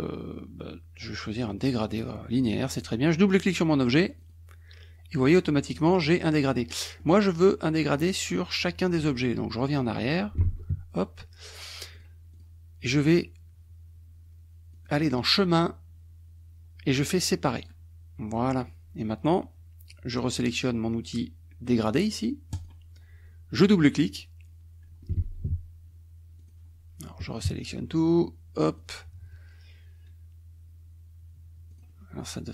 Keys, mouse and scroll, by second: 3.3 click, 4.1 click, 6.7 middle click, 10.0 click, 10.5 ctrl+z, 12.1 click, 12.3 click, 14.7 click, 17.6 click, 22.6 click, 24.0 click, 25.3 ctrl+z, 26.4 click, 27.3 KP_Subtract, 28.0 click, 31.7 click.